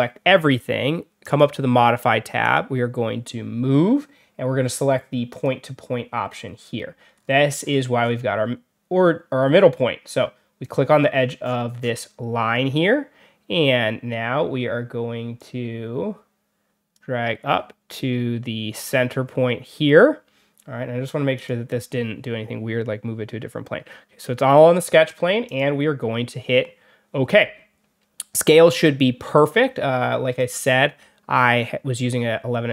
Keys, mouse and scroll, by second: 1.1 click, 2.3 click, 5.2 click, 6.3 scroll down 1, 7.0-8.1 scroll down 5, 10.5 click, 10.9 scroll down 1, 11.3 scroll up 1, 11.7 scroll down 2, 12.4 scroll up 2, 15.3-16.8 drag, 18.7 click, 21.2 click, 25.4 click, 30.3 click.